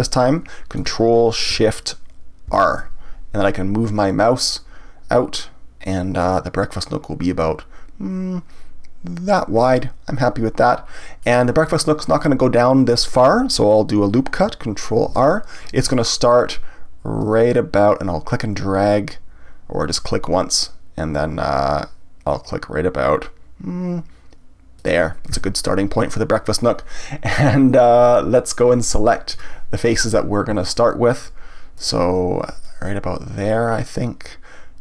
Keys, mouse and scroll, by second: 2.5 ctrl+shift+r, 9.4 click, 10.6-13.7 middle drag, 15.1 ctrl+r, 24.9 click, 29.3 click, 30.0 click, 30.7 shift+click, 31.2 shift+click, 31.7 shift+click, 32.6-34.8 middle drag.